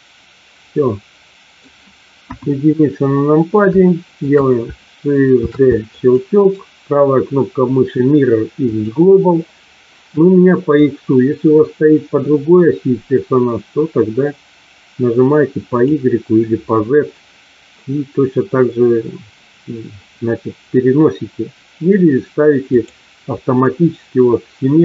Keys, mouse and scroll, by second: 2.2 KP_1, 3.7 shift+middle click, 5.3 shift+d, 6.0 click, 6.5-8.8 right drag, 10.8-15.7 drag, 22.6-24.8 drag.